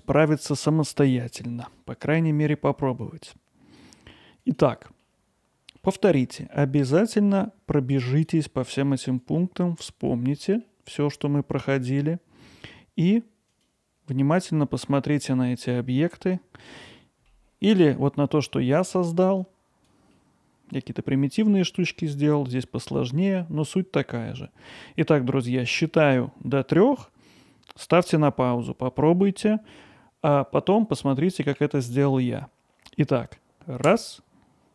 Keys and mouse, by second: 4.5 click, 5.0-5.8 middle drag, 6.4 middle click, 7.4-8.3 drag, 8.6 middle drag, 9.3-10.1 drag, 10.4 middle drag, 11.1-11.8 drag, 17.0 middle drag, 17.7 middle click, 18.0-18.4 alt+middle drag, 18.5-18.9 ctrl+alt+middle drag, 19.5-19.9 drag, 20.1-21.8 alt+middle drag.